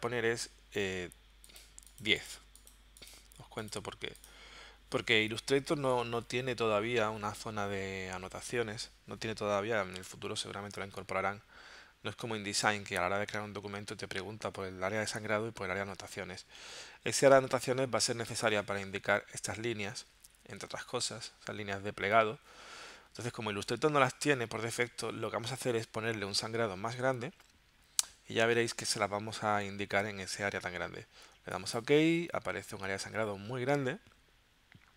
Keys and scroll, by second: 16.7 super+Tab, 25.8 super+Tab.